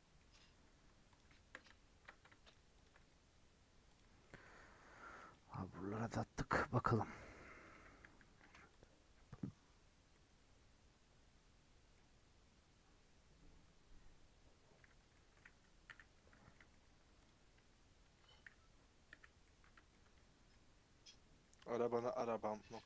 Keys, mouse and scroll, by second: 0.1 middle click, 1.1 click, 2.8 shift+click, 2.9-4.1 right drag, 4.1 scroll down 5, 4.2 middle click, 4.7 middle click, 4.9-5.7 scroll up 6, 5.1 middle click, 6.0 middle click, 6.5 scroll down 4, 6.7 middle click, 7.4 scroll up 1, 7.5 scroll down 1, 7.7 a, 8.8 u, 14.6 scroll down 5, 14.8 Tab, 15.1 middle click, 15.8 /, 16.3 scroll down 2, 16.5 middle click, 16.7 scroll up 2, 17.2 click, 17.5 Tab, 18.0 Tab, 19.1 /, 19.4 middle click, 20.0 Tab, 20.4-21.5 middle drag, 21.5 3, 21.8 Left, 22.1 middle click.